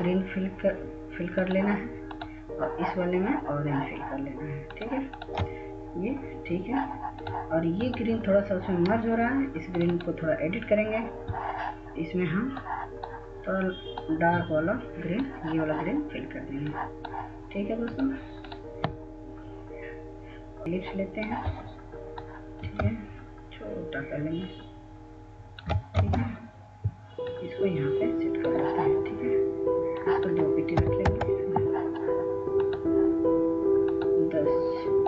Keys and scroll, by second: 26.8 ctrl+space, 31.6-32.1 typing.